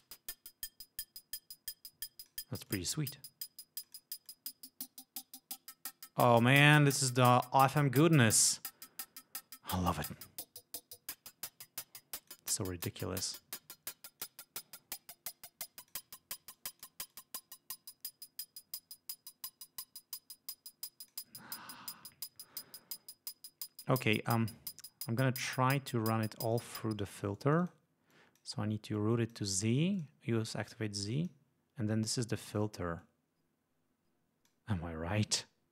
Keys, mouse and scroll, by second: 2.8 click, 4.0 click, 4.4-6.8 drag, 10.3-12.7 drag, 12.8 click, 13.6 click, 14.9-16.3 drag, 16.7 click, 17.3-21.5 drag, 26.6 click, 28.3 click, 29.1 click, 30.1 click, 30.9 click, 33.2-34.9 drag.